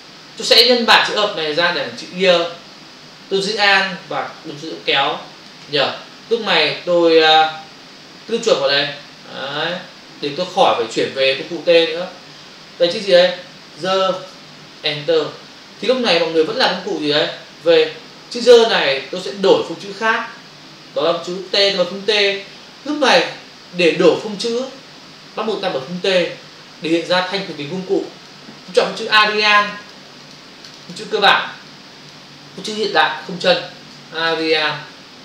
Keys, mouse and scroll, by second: 4.3 alt+click, 9.4 click, 11.3 click, 11.6 double click, 14.9 Return, 18.2 click, 28.0 click, 28.8 click, 29.6 click, 29.7 double click, 29.8 click, 30.2 click, 30.3 double click, 30.7 click, 30.9 double click, 31.7 click.